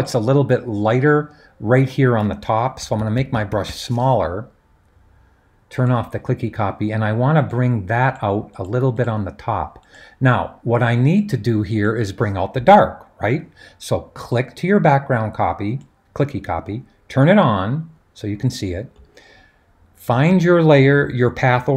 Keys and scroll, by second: 2.8-3.7 typing.